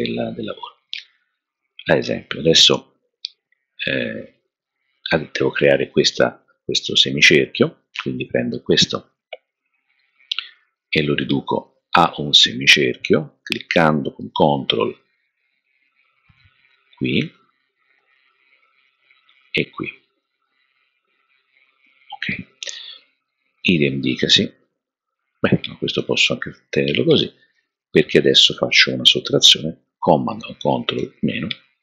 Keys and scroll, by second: 30.9 super+-.